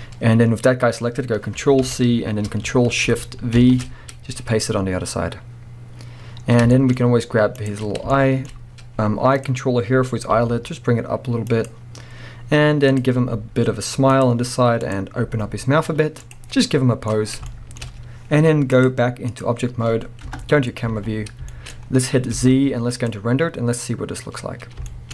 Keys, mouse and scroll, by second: 0.2-1.5 scroll up 1, 1.9 ctrl+c, 3.6 ctrl+shift+v, 4.6-5.2 scroll down 2, 5.2-6.7 scroll down 1, 6.7 shift+middle click, 7.0-7.6 scroll up 2, 7.6 click, 7.8 scroll up 2, 8.1-9.3 shift+middle drag, 8.5-9.3 scroll up 2, 9.4 click, 9.8-10.3 scroll up 1, 10.3 g, 11.7 click, 12.1-12.9 scroll down 1, 12.9 click, 13.2 g, 14.2 click, 14.8 click, 15.3 g, 16.5 scroll down 2, 16.6 middle click, 17.3 scroll down 2, 17.5-18.7 shift+middle drag, 18.7-21.5 drag, 19.6-20.3 scroll down 2, 20.3 KP_0, 20.9 alt+a, 21.2-21.5 scroll down 2, 21.5-24.5 shift+middle drag, 21.8-22.4 scroll up 2, 22.4 z, 24.7 scroll down 1.